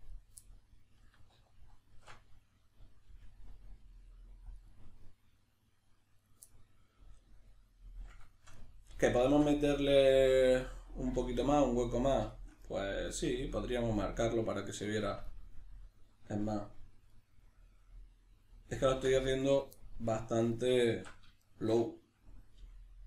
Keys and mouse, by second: 0.1 right click, 0.4-4.6 middle drag, 1.4 alt+q, 3.1 g, 4.6 click, 4.7-6.2 middle drag, 6.2 right click, 6.5-19.5 middle drag, 18.9 ctrl+r, 19.5 right click, 19.8-23.0 middle drag, 20.9 alt+q, 22.6 g.